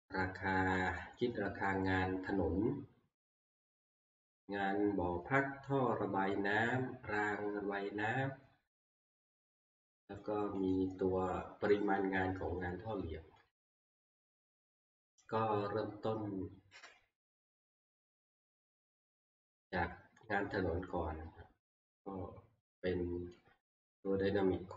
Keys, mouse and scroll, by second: 0.7 scroll, 4.2 shift+scroll, 7.3 middle click, 7.4 middle click, 9.9 shift+middle click, 10.7 click, 13.9 shift+middle click, 14.3 middle click, 14.4 middle click, 15.0 scroll, 17.5 middle click, 18.3 click, 19.9-20.4 scroll, 23.3 click.